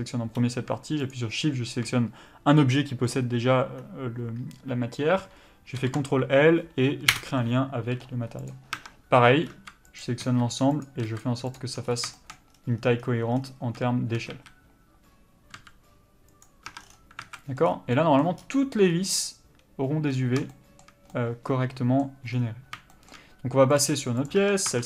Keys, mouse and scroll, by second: 7.2 ctrl+l, 8.5 click, 8.8 Tab, 9.5 s, 10.8 click, 11.1 s, 11.2 click, 11.8 scroll up 1, 12.1 shift+middle click, 12.5-13.0 scroll down 1, 13.7-14.3 scroll up 1, 14.3 a, 15.6 s, 16.7 Tab, 16.8 scroll down 1, 17.2 alt+a, 17.3 middle click, 17.6 scroll up 1, 17.9 middle click, 18.4 scroll up 1, 20.1 scroll down 1, 20.5 shift+middle click, 22.3 scroll down 1, 22.9 shift+middle click, 23.8 click, 24.3 Tab.